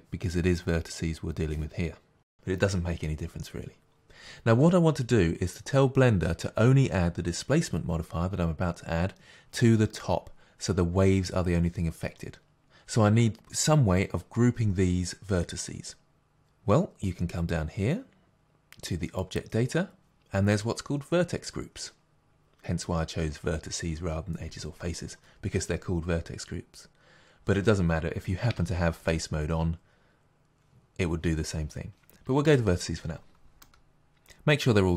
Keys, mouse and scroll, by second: 33.6 middle click.